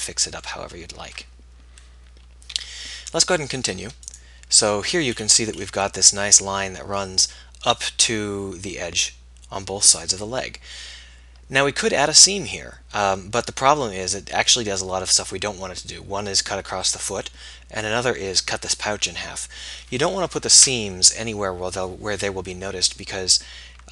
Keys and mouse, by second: 2.7 z, 5.3 click.